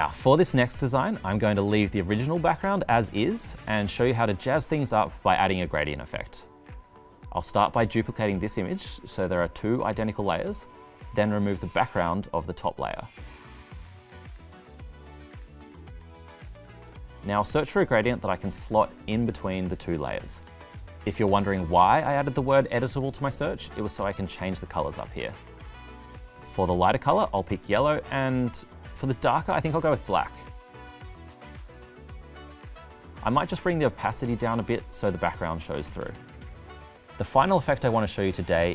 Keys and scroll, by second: 8.6 super+c, 9.4 super+v.